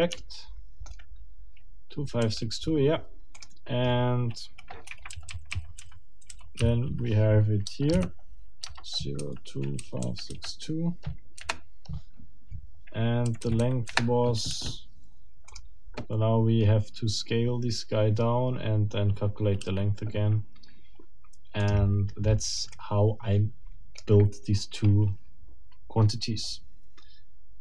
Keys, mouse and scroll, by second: 0.2 shift+middle click, 0.7 shift+middle click, 4.9 Escape, 5.1 k, 5.3 l, 6.6 i, 7.7-10.3 typing, 11.3 Delete, 13.3 Right, 13.9 Delete, 22.7 click, 23.7 click.